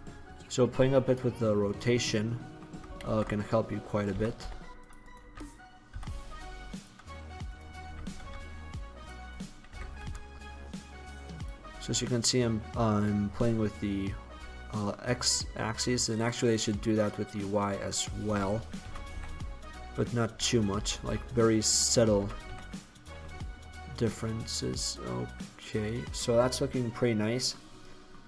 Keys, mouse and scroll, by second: 2.1-2.5 middle drag, 3.1 ctrl+z, 4.3 r, 5.2 right click, 5.4 r, 6.9 click, 7.6-7.9 right drag, 7.9 r, 9.1 click, 9.8 r, 11.3 click, 11.7 drag, 12.2 click, 12.5 middle drag, 12.7 middle click, 12.9 middle click, 13.1 middle click, 16.4 middle click, 16.7-18.0 middle drag, 18.9 r, 20.9 t, 21.2 y, 22.3 r, 23.9 middle click, 24.1 middle click, 24.3 middle click, 24.6 drag, 26.4 middle click, 26.5-27.4 drag, 27.4-28.2 middle drag.